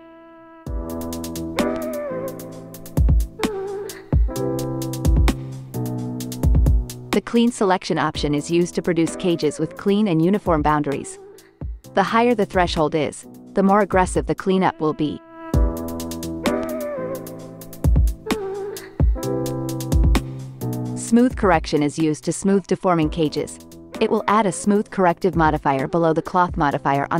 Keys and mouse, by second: 3.5 click, 4.9 x, 6.4-7.0 drag, 7.6 click, 11.2-11.8 drag, 13.7 x, 14.1 click, 14.5 ctrl+Tab, 15.5-17.5 drag, 18.0-20.3 drag, 22.0 click, 22.9 click, 24.8 click, 25.1 ctrl+Tab, 25.5 ctrl+Tab, 26.5-27.1 drag.